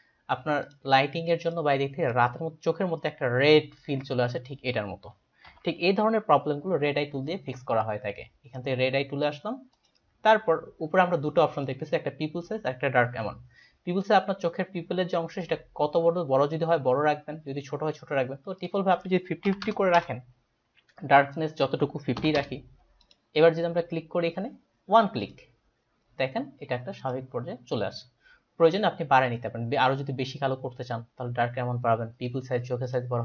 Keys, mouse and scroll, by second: 0.6 ctrl+click, 1.4 ctrl+click, 5.5 ctrl+j, 8.6 right click, 9.8 click, 18.6 click, 19.5-20.5 typing, 20.0 Return, 20.5 Return, 21.4 click, 22.2 KP_5, 22.4 KP_0, 23.0 click, 25.2 click, 27.1 click, 32.9 click.